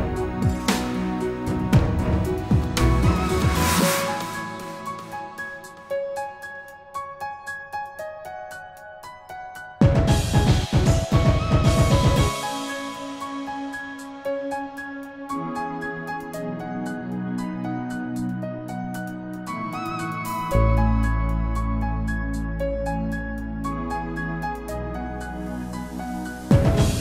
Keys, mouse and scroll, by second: 0.0-0.3 typing, 1.2 click, 1.3 double click, 2.7 ctrl+a, 2.9-5.4 typing, 6.1 click, 7.0 ctrl+z, 7.2 ctrl+z, 9.4 click, 10.9 click, 11.9-12.4 typing, 13.8-19.3 typing, 20.8 click, 22.4 ctrl+z, 22.6-23.6 ctrl+z, 23.8 ctrl+z, 24.0 ctrl+z, 24.2 ctrl+z, 24.4 ctrl+z, 24.6 ctrl+z, 26.7 click.